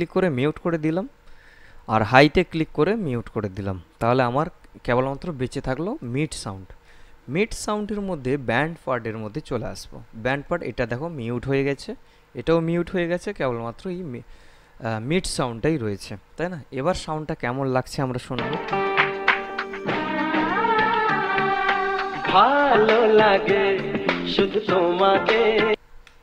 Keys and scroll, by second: 18.5 space, 25.9 space.